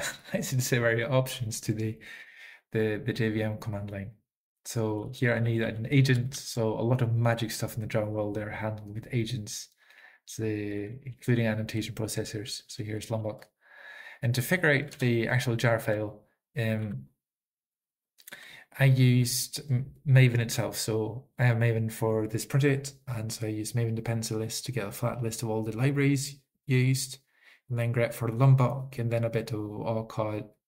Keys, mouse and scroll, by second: 5.1 Up, 5.1 alt+f, 5.3 alt+f, 5.5 alt+f, 5.7 alt+f, 5.9 alt+f, 10.9 alt+f, 10.9 alt+b, 11.1 alt+f, 11.4 alt+f, 11.7 alt+f, 12.5 alt+f, 12.7 alt+f, 12.9 alt+f, 13.1 alt+f.